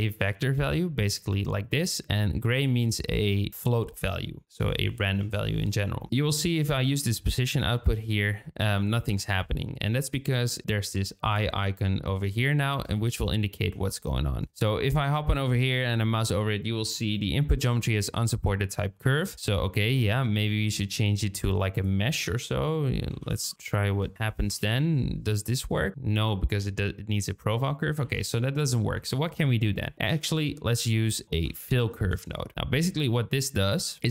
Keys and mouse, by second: 0.1 shift+middle click, 4.5-5.6 drag, 6.0-7.6 drag, 8.7 shift+middle click, 12.3 shift+middle click, 20.5 shift+middle click, 21.3 shift+a, 28.0 ctrl+x, 28.9 shift+a, 31.2 BackSpace, 31.8 l.